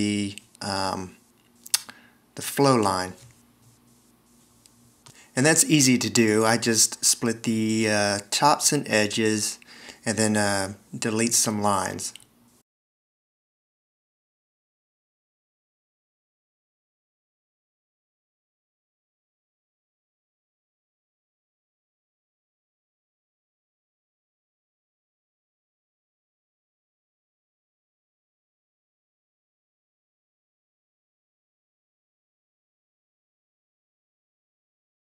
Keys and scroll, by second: 15.7 shift+x, 17.5 a, 18.3 shift+x, 21.2 s, 21.7 alt+r, 25.8 shift+x, 26.8 a, 27.5 shift+x, 29.8 s, 31.9 BackSpace, 34.8 v.